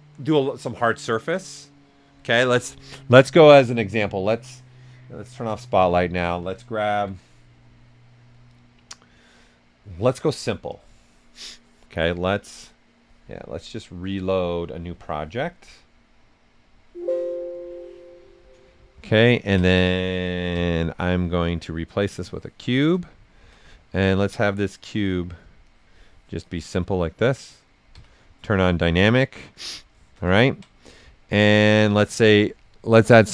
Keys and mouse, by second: 3.7 click, 5.3 shift+z, 6.9 ,, 10.7 click, 14.7 click, 14.7 click, 18.8 alt+right click, 19.5 ctrl+right click, 20.5 w, 21.4 click, 22.6 shift+f, 23.2 ctrl+right click, 24.2 click, 25.0 right click, 25.6 click, 26.2 right click, 27.9 d, 29.3 right click, 30.3 ctrl+right click, 31.1-33.2 right drag, 33.2 shift+click.